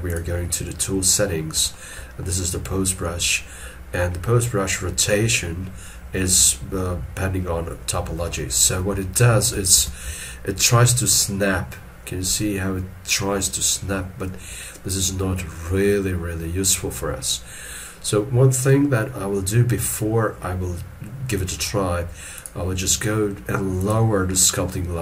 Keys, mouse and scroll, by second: 9.7 alt+e, 10.4 scroll up 1.